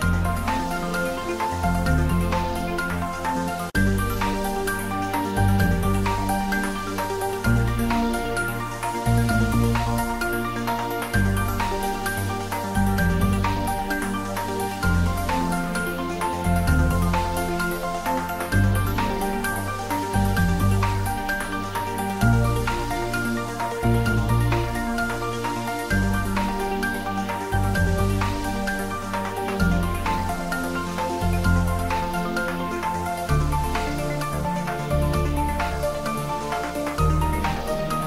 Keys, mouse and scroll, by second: 0.3 Tab, 0.7 ctrl+z, 1.5 Tab, 1.7 click, 4.2 ctrl+middle click, 5.0 middle click, 5.8 Tab, 6.9 ctrl+3, 7.6 shift+middle click, 8.1 right click, 8.7 click, 9.2-10.5 middle drag, 10.5 middle click, 11.4 click, 11.9 middle click, 12.7 ctrl+middle click, 13.0 shift+middle click, 13.4 ctrl+middle click, 13.8-16.8 middle drag, 16.8 ctrl+middle click, 17.3 ctrl+s, 17.8 ctrl+middle click, 18.1-20.0 shift+middle drag, 20.0 shift+click, 22.4 ctrl+j, 23.3 shift+click, 24.8 click, 25.4 shift+click, 26.1 click, 28.2 ctrl+middle click, 28.6 ctrl+s, 28.9-30.7 shift+middle drag, 31.2 click, 32.1 ctrl+z, 32.9 click, 33.3 ctrl+z, 36.1 shift+middle click, 36.5 ctrl+middle click, 37.0 shift+middle click, 37.4 shift+click.